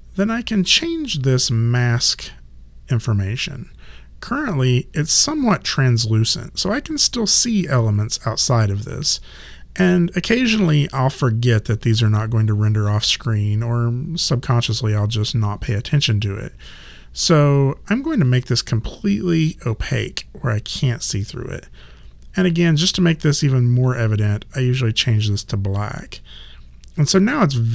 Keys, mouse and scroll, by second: 0.6 click, 18.3 click, 23.9 click, 26.2 click.